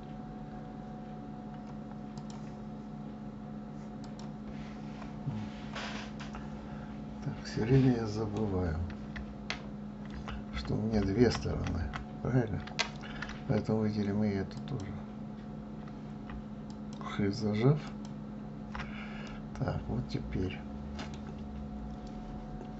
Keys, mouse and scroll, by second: 2.1-4.2 drag, 4.5-5.3 scroll down 4, 5.6 scroll up 1, 6.2-9.2 middle drag, 10.2 ctrl+z, 10.5 ctrl+z, 10.9 ctrl+z, 11.2 ctrl+z, 11.4 ctrl+z, 11.8 ctrl+z, 14.6 shift+click, 16.7 alt+shift+click, 17.9 alt+shift+click, 19.3-22.3 middle drag.